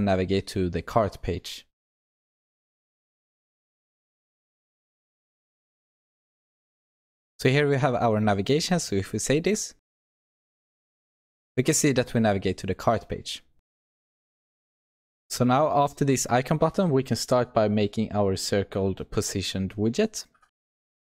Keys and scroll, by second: 4.3 ctrl+v, 5.6 alt+Return, 9.8 ctrl+s.